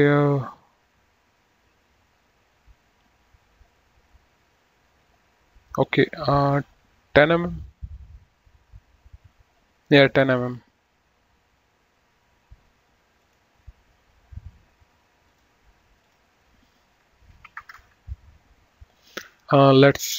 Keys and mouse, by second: 13.5 click, 15.3 click, 17.7 KP_1, 17.9 KP_0, 18.0 KP_Enter.